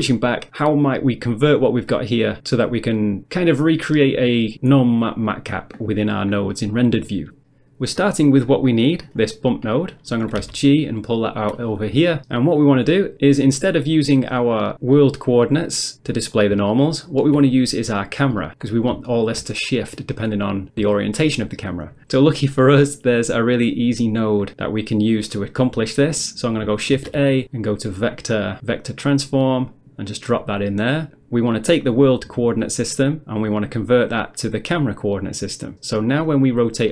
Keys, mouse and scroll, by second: 9.3 middle click, 9.7 middle click, 10.4 g, 11.3 click, 13.4 middle click, 14.7 middle click, 16.7 shift+middle click, 18.5 middle click, 19.1 shift+middle click, 20.9 shift+middle click, 27.0 shift+a, 29.6 click, 30.3 click, 33.3 click, 34.4 click, 35.7 middle click.